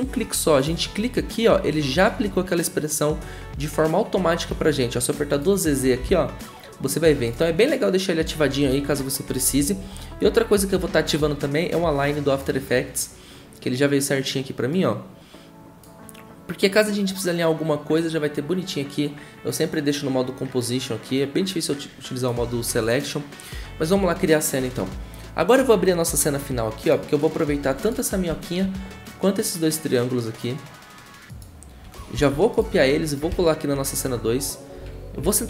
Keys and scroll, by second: 5.8 typing, 9.5 Delete, 32.1 ctrl+c, 33.3 ctrl+v.